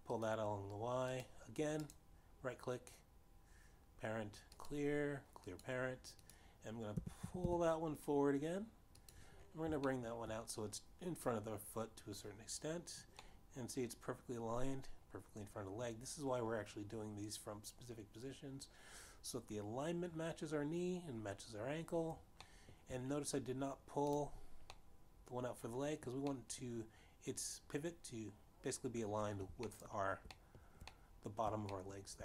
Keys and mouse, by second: 0.3 y, 1.7 click, 2.6 click, 3.3 right click, 6.1 click, 7.1 click, 7.8 click, 8.4 g, 8.4 y, 8.8 y, 10.6 click, 11.3 shift+middle click, 14.8 middle click, 24.0 shift+middle click, 25.4 click, 26.3 middle click, 27.8 middle click, 31.3 shift+middle click, 31.3 shift+right click, 31.8 shift+middle click.